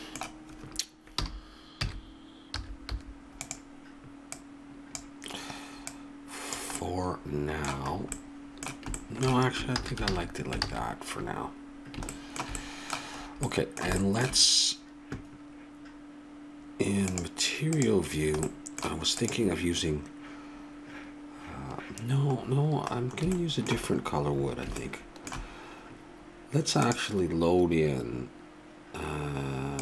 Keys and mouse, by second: 1.2 r, 4.3-6.8 drag, 6.8-8.0 middle drag, 8.2-9.4 middle drag, 9.8 ctrl+z, 10.1 ctrl+z, 10.6 ctrl+z, 17.1-19.2 drag, 19.2-21.0 right drag, 21.0-23.4 drag, 23.4-25.1 middle drag, 26.8-28.8 drag.